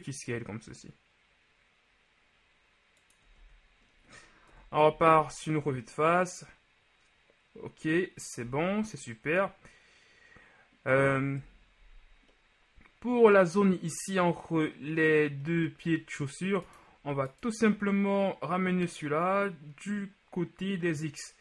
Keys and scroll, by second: 3.4 z, 4.5 KP_1, 4.9 z, 8.5 z, 11.5 KP_1.